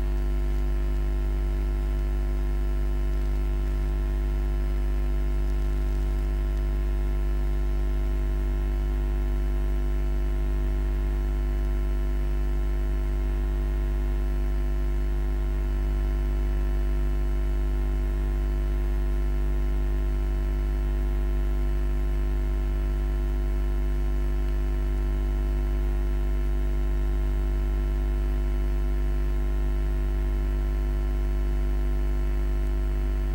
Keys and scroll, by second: 16.3 5, 16.6 Return.